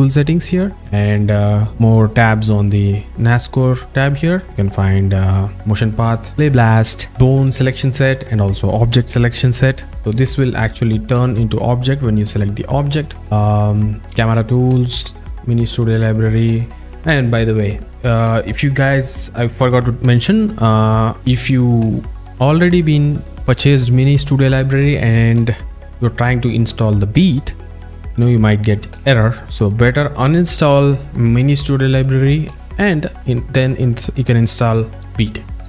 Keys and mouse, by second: 0.0 alt+middle click, 4.7 click, 5.2 click, 6.3 drag, 7.1 click, 14.9 click, 15.7 click.